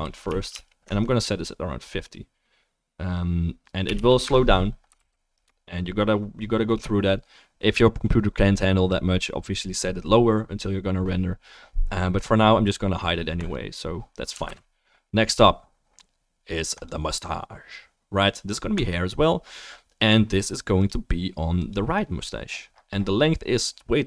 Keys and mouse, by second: 5.0 ctrl+s, 6.3-13.5 middle drag, 14.5 ctrl+s, 14.5-16.7 drag, 18.8 click, 19.3-20.8 right drag, 20.8-23.3 middle drag.